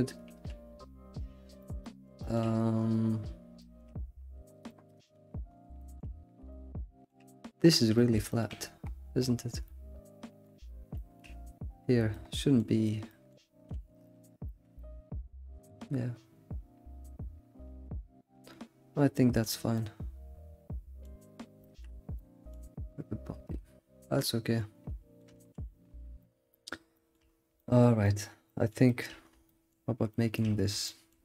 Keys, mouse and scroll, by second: 1.8-2.4 middle drag, 2.4-3.6 scroll up 9, 3.6-7.8 shift+middle drag, 4.3-4.7 scroll up 8, 5.2-5.8 scroll up 4, 7.8 scroll down 2, 7.9-13.4 middle drag, 9.4 scroll down 1, 13.4-13.7 scroll up 3, 13.7 alt+shift+z, 14.0-17.8 middle drag, 19.4 scroll up 1, 19.6 scroll down 1, 19.7-21.2 middle drag, 21.2-22.1 scroll down 5, 21.6-22.0 shift+middle drag, 22.1-23.3 middle drag, 23.3 scroll down 1, 23.4-25.3 middle drag, 25.6-26.2 scroll down 3, 26.3-27.3 shift+middle drag, 27.3 scroll up 1, 27.8-29.2 shift+middle drag, 29.2-29.5 scroll up 1, 29.5-30.5 shift+middle drag.